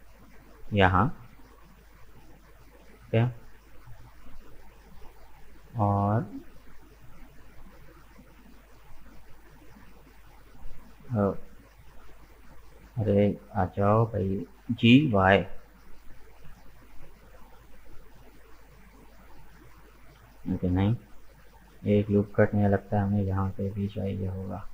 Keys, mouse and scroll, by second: 6.3-7.7 drag, 7.7-9.1 middle drag, 9.1 right click, 10.3-12.1 drag, 12.1 middle click, 12.8 right click, 13.1 middle click, 14.1 scroll down 1, 14.8 g, 17.9-20.2 middle drag, 20.2 ctrl+z, 20.6-23.0 middle drag, 23.0 ctrl+r.